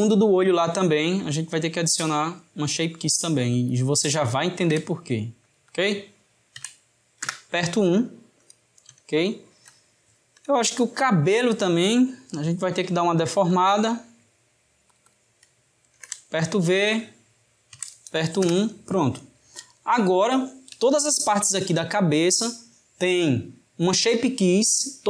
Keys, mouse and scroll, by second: 1.2-2.6 drag, 2.6-3.6 middle drag, 3.6 click, 3.8-5.5 drag, 5.7-8.8 drag, 9.2-11.4 ctrl+middle drag, 11.4 click, 12.8-14.0 drag, 14.0 middle click, 15.0 click, 15.1-16.7 drag, 16.9-19.8 drag, 19.8-24.0 shift+middle drag.